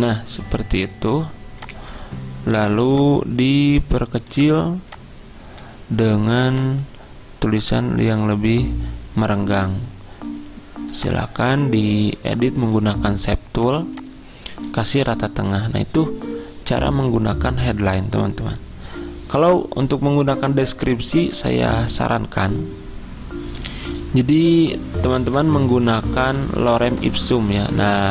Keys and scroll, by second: 0.0-0.3 typing, 3.5 typing, 15.1 c, 25.3 super+m.